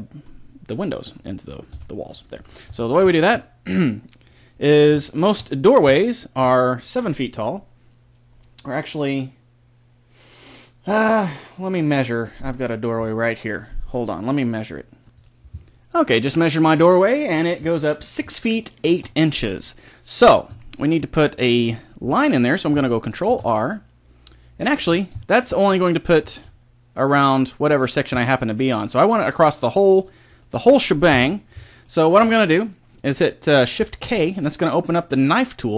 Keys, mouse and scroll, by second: 1.7 KP_1, 2.6 Tab, 20.6-23.2 middle drag, 23.2 ctrl+r, 24.6-29.4 right drag, 26.2 ctrl+r, 30.1-32.0 right drag, 31.1 KP_1, 34.0 shift+k.